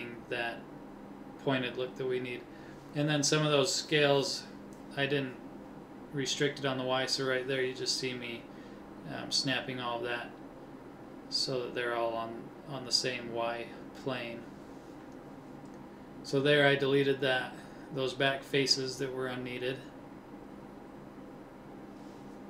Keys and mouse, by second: 0.5 a, 0.6 b, 2.3 s, 4.0 a, 4.1 b, 5.8 s, 8.0 middle click, 9.6 middle click, 12.0 ctrl+Tab, 14.2 Delete, 19.7 ctrl+Tab, 21.3-22.4 drag.